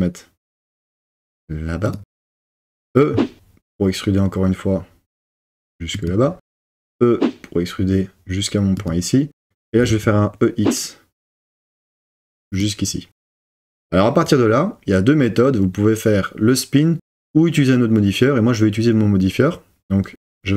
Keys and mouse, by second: 1.9 click, 2.6 e, 6.0 click, 6.6 e, 9.7 e, 10.0 x, 12.6 click.